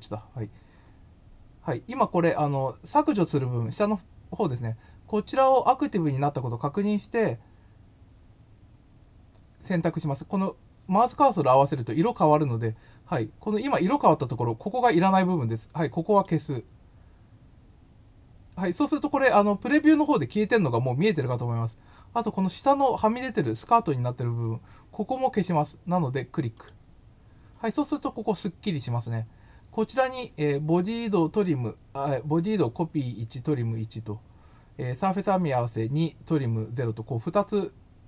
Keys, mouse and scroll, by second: 16.1 click, 26.5 click.